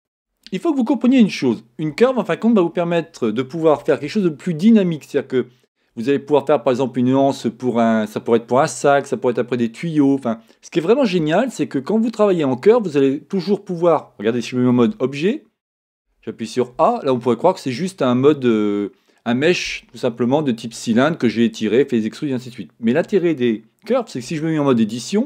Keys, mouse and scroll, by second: 0.0-25.2 shift+middle drag.